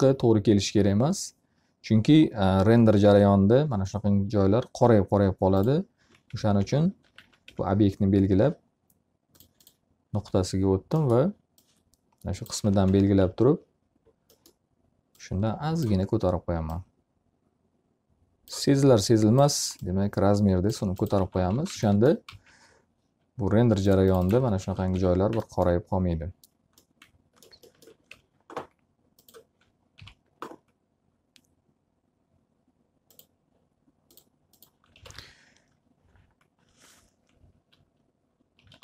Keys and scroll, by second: 5.7 F3, 6.8-7.5 typing, 12.1 space, 13.1 s, 20.3 space, 21.1 x, 21.5 z, 21.6 alt+a, 22.2 z, 24.3 alt+a, 24.9 F3, 28.0 F4, 29.9 m, 34.4 s, 35.0 w, 38.5 m.